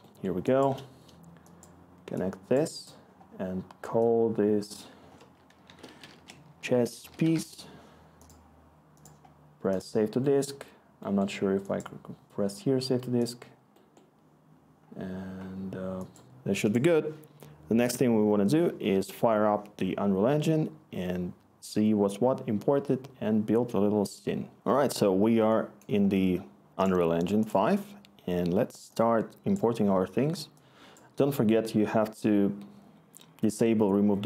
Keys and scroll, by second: 5.6-7.8 typing.